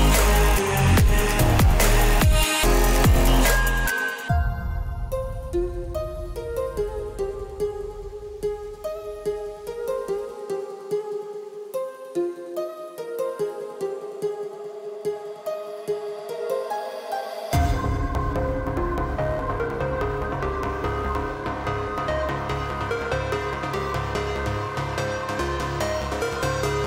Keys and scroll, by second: 13.8 ctrl+alt+shift+e.